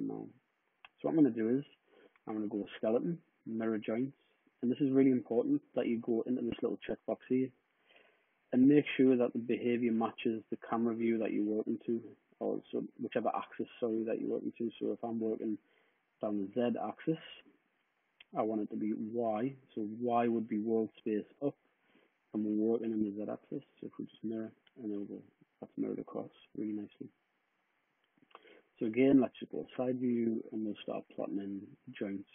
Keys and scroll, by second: 28.6 space.